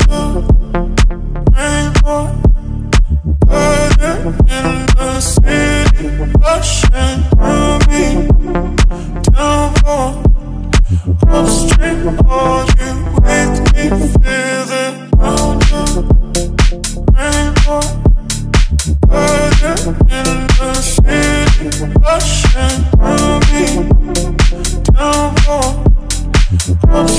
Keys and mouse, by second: 0.2 z, 0.8 click, 1.0 s, 1.7 click, 3.6 click, 3.9 x, 4.4 click, 5.0 g, 6.3 click, 7.4 click, 7.4 z, 10.2 shift+a, 11.0 ctrl+a, 13.4 middle drag, 13.8 ctrl+middle drag, 14.2-14.6 middle drag, 17.1 KP_1, 17.7-18.2 ctrl+middle drag, 19.0 shift+z, 19.2 middle drag, 19.6 Tab, 20.8 middle click, 21.6 KP_3, 22.4 KP_Decimal, 23.2 e, 23.7 click, 24.5 ctrl+z, 25.1 g, 25.3 y, 26.0 e, 26.6-27.1 drag.